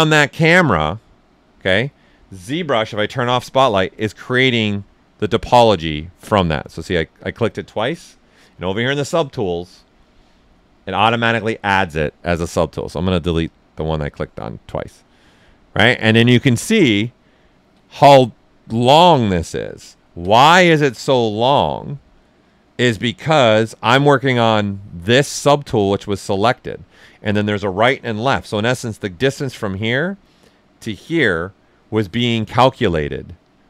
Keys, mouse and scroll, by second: 2.7 click, 3.0 shift+z, 3.5-6.4 right drag, 12.8 click, 16.8 ctrl+right click, 18.0-19.4 alt+right drag, 19.4 click, 19.9 ctrl+right click, 20.2 ctrl+alt+right click, 20.5 typing, 23.4 click, 28.2-31.2 right drag, 31.2-32.9 right drag, 32.9 click, 33.5 alt+right click.